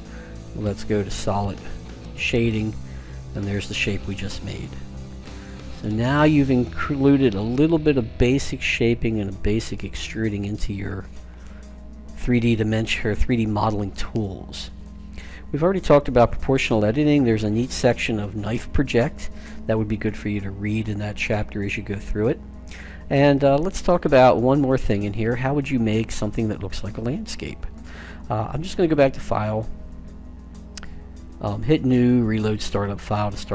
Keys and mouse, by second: 0.0 click, 0.6-2.2 drag, 2.4-4.2 middle drag, 28.7-30.4 drag.